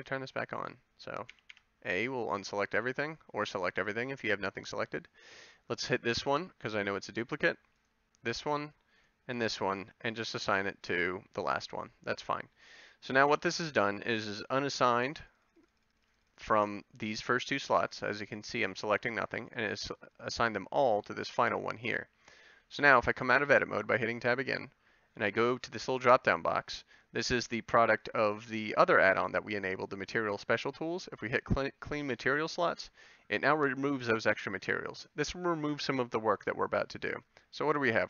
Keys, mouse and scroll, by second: 1.4 a, 1.5 a, 13.3 a, 21.5 a, 23.2 Tab.